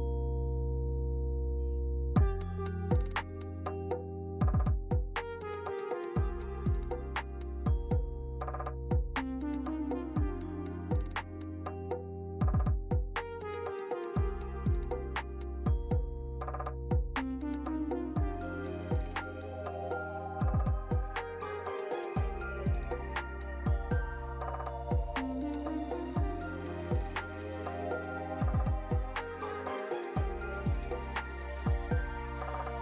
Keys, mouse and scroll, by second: 0.2 right click, 2.3 click, 3.5 click, 4.3 click, 4.4 click, 8.3 click, 13.8 click, 16.7 z, 19.1 z, 22.7 right click, 23.8 click, 24.0 click, 27.5 click, 32.1 click.